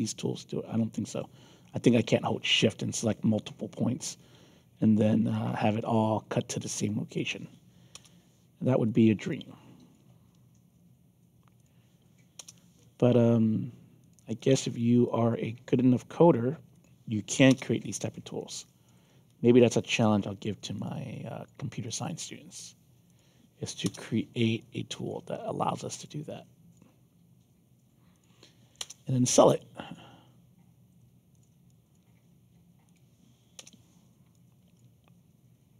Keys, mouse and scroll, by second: 2.2 ctrl+z, 4.8 alt+click, 7.0 click, 7.9 Return, 8.8 click, 9.2 alt+click, 11.5 click, 12.3 Return, 14.0 click, 14.3 alt+click, 15.0 alt+click, 16.7 click, 17.4 Return, 18.3 alt+click, 19.2 alt+click, 20.7 click, 21.1 alt+click, 21.8 alt+click, 23.0 click, 23.8 Return, 24.5 alt+click, 25.9 click, 26.2 alt+click, 28.1 click, 28.8 Return, 29.5 alt+click, 31.3 click, 31.6 alt+click, 32.8 click, 33.5 Return, 34.3 alt+click.